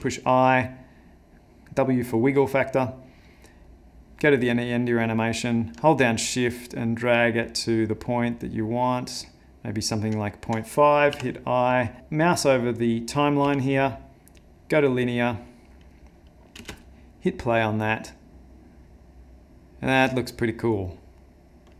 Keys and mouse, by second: 3.1 click, 6.1 shift+click, 13.4 t, 16.6 space.